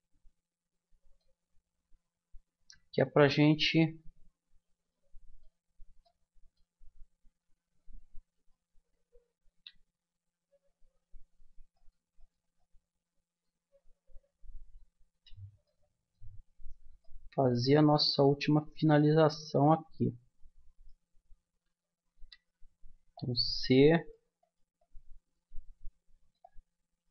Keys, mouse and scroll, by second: 0.0 middle click, 2.5 a, 4.9 middle click, 8.1-9.9 right drag, 9.5 c, 15.2 click, 15.6-21.7 middle drag, 22.2 c.